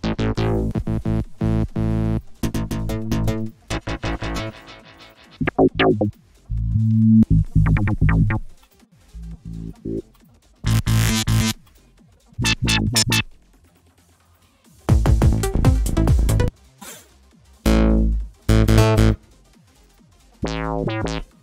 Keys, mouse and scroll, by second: 0.4 click, 2.0 click, 3.3 click, 4.4 click, 4.9 click, 6.0 click, 6.8 click, 8.5 click, 10.1 click, 11.6 click, 13.6 click, 14.2 click, 16.0 click, 16.8 click, 18.9 click, 19.8 click.